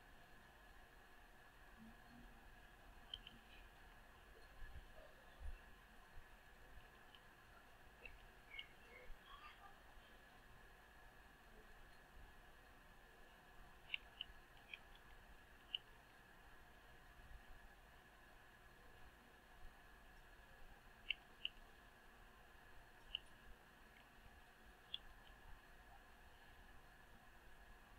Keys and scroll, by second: 3.7 Return, 14.9 Return, 23.8 Return.